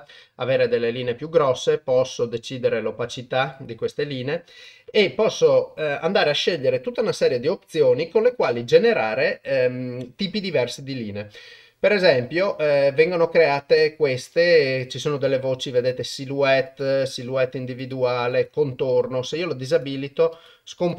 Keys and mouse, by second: 1.3-3.6 drag, 4.6 click, 12.6-14.6 drag, 15.9-16.8 drag, 17.9-18.5 drag, 19.7 click, 20.3 click, 20.8 click.